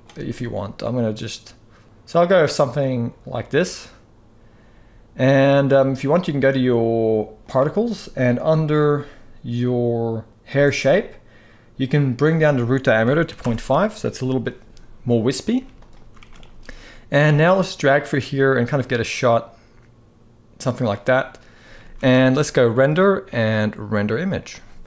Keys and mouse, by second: 7.1 click, 10.3-13.1 drag, 15.2 z, 15.9 ctrl+s, 16.2 ctrl+s, 17.0-20.5 drag, 21.5 ctrl+s, 22.5-24.8 drag.